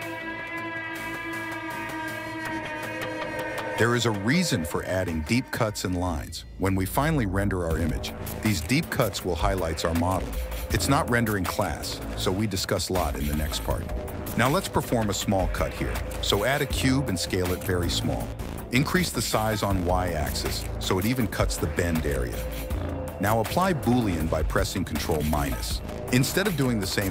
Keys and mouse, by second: 1.2 s, 2.9 Tab, 5.6 middle click, 6.1 middle click, 7.2 right click, 7.5 click, 9.5 KP_1, 11.8 shift+right click, 12.2 shift+a, 13.8 s, 15.4 s, 16.7 s, 17.6 g, 18.5 s, 19.1 s, 20.7 s, 25.1 shift+middle click, 26.0 ctrl+KP_Subtract.